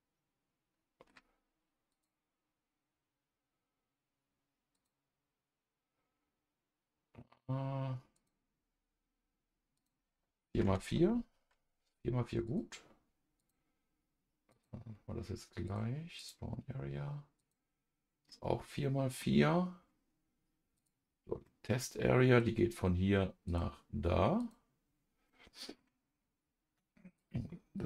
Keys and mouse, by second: 1.9 click, 4.7 click, 8.1 click, 9.7-12.5 drag, 13.4 click, 14.5 click, 15.6 click, 16.1 click, 17.4 click, 18.3 middle click, 20.7 click, 21.4 middle click, 23.4 click, 24.4 click, 25.2 middle click, 27.7-27.8 drag.